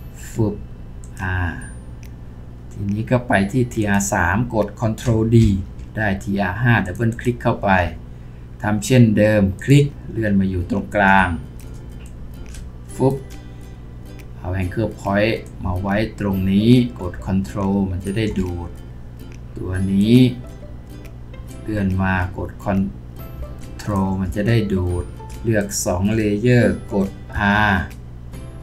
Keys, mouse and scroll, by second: 5.4 ctrl+d, 7.1 double click, 25.6 shift+click.